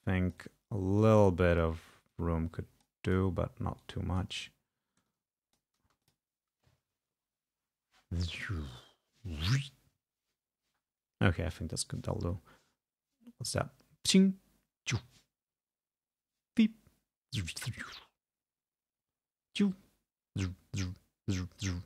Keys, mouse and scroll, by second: 1.6 click, 2.2 click, 3.9 click, 5.2 ctrl+click, 6.1 click, 6.1 space, 11.4 space, 12.3 space.